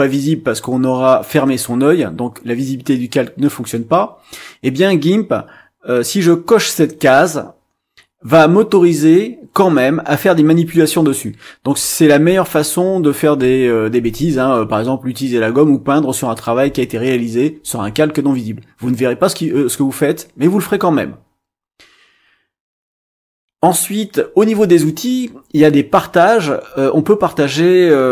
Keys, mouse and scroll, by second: 9.7-13.6 drag.